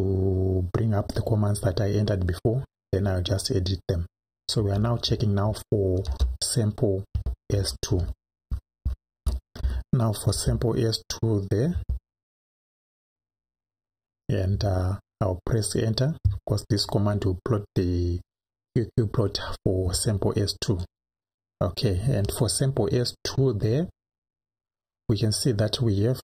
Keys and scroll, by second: 3.0 Left, 4.6 Left, 6.1 BackSpace, 7.1 2, 7.6 Right, 10.3 BackSpace, 11.7 2, 13.4 Right, 20.8 Return.